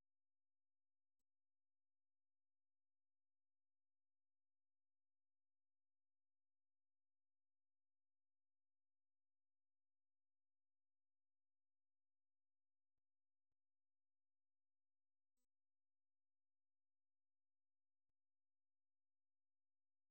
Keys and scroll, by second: 3.4-4.8 typing, 10.4-16.2 typing, 20.0-20.1 typing.